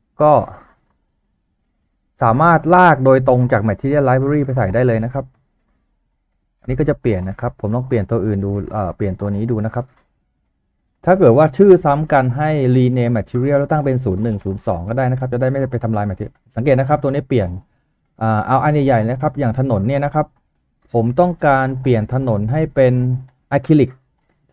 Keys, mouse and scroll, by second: 14.1 typing.